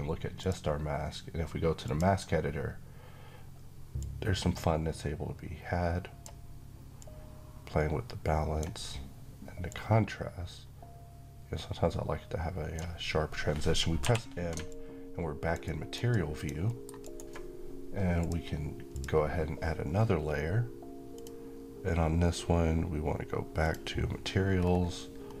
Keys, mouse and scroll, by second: 0.1-6.2 drag, 13.7 m, 14.4-15.3 click, 15.3 alt+right click, 15.8-16.7 alt+click, 16.4 alt+middle click, 16.7 alt+right click, 17.9 click, 23.3 click, 24.3 scroll down 1, 24.9-25.4 scroll up 1.